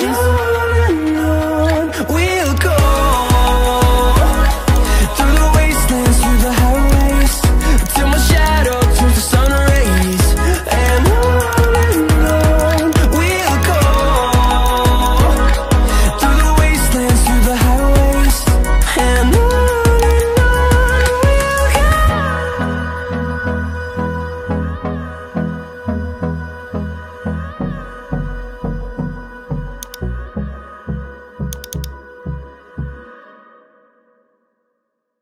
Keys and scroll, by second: 4.1 ctrl+alt+z, 22.7 ctrl+j.